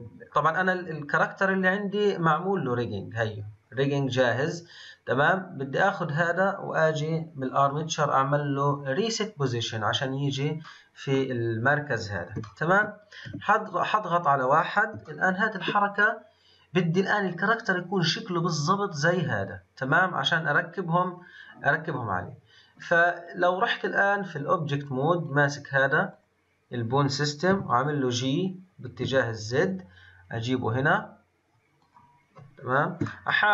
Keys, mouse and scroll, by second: 0.7-1.6 scroll up 5, 1.6 click, 2.3 click, 3.6-4.7 scroll down 3, 4.7 click, 7.6-9.0 scroll up 2, 9.0 click, 10.1-10.7 scroll down 3, 10.7-11.5 middle drag, 11.5-12.4 scroll up 3, 12.4 shift+scroll up 1, 12.4-13.2 shift+middle drag, 13.2 KP_1, 14.1-15.1 scroll up 3, 15.1-18.0 shift+middle drag, 20.4 click, 23.2-25.3 drag, 26.1 click, 27.5 g, 32.2 scroll up 1, 33.0 shift+scroll up 1, 33.1-33.5 shift+middle drag.